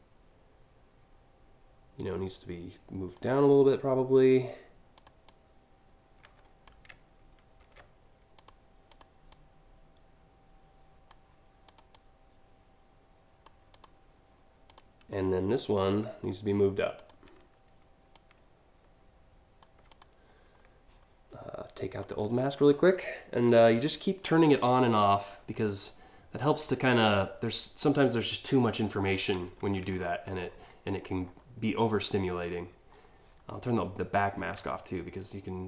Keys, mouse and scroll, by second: 4.6 click, 4.9-6.3 drag, 7.2 ctrl+z, 8.0 click, 8.5 click, 8.9-10.7 drag, 11.3 click, 11.5-13.0 drag, 13.4 click, 14.3 click, 15.4 click, 16.6 shift+click, 17.8-19.2 shift+drag, 19.5 click, 21.6 click, 22.3 scroll down 2, 25.2 alt+scroll down 1, 26.2-26.7 scroll up 2, 29.6 alt+scroll down 1, 30.1-30.7 alt+scroll up 2, 30.9 alt+scroll down 1, 32.0 scroll up 1, 32.6 scroll up 3, 33.7 click, 34.3-35.3 alt+scroll down 2, 35.3 alt+scroll up 1.